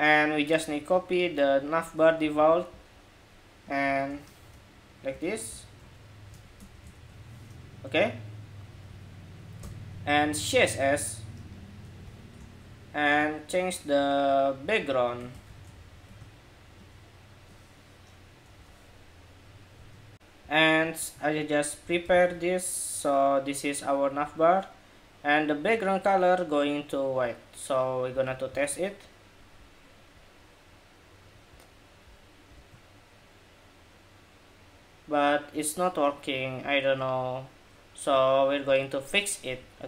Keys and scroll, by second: 2.0 super+c, 2.2 super+c, 6.6 super+v, 18.2 super+s, 21.8 super+v, 27.8 super+s, 28.3 super+Tab, 32.3 super+r.